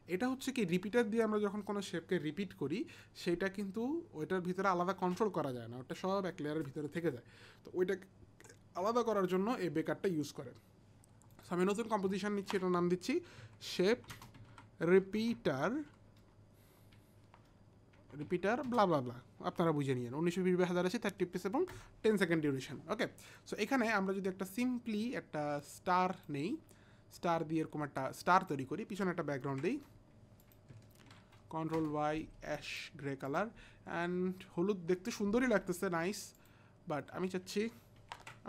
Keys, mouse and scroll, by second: 11.3 click, 13.0-16.2 typing, 13.2 click, 18.7 space, 20.9-21.6 typing, 21.7 Return, 24.6 click, 27.2 click, 29.5 ctrl+t, 30.4 click, 31.0 ctrl+y, 31.8 Return, 31.8 ctrl+y, 31.8 ctrl+t, 31.8 click, 32.5 click, 33.3 Return, 33.3 ctrl+y, 33.3 ctrl+t, 33.3 click, 36.3 click, 38.3 ctrl+alt+Home, 38.3 click.